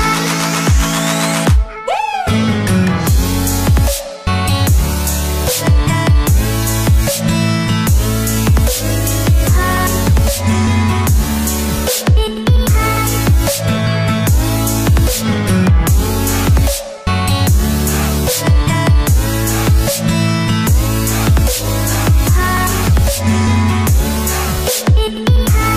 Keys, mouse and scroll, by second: 2.3-4.9 drag, 9.6 space, 9.7-10.6 click, 10.1 space, 11.2-11.8 drag, 24.5 click.